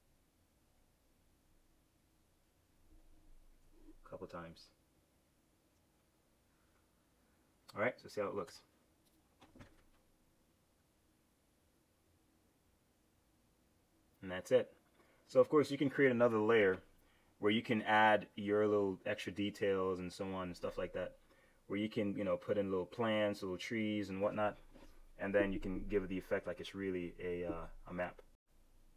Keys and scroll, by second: 8.3 super+Return.